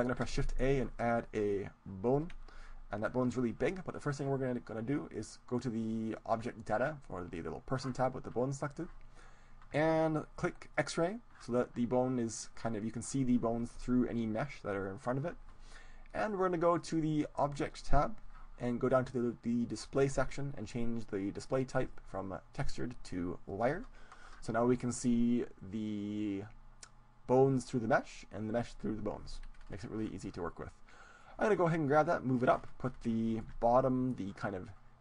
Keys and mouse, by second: 0.2 shift+a, 6.2-12.6 drag, 16.8-19.0 drag, 21.8-24.8 drag, 29.6-31.2 middle drag, 31.2-33.2 drag, 33.3-35.0 middle drag.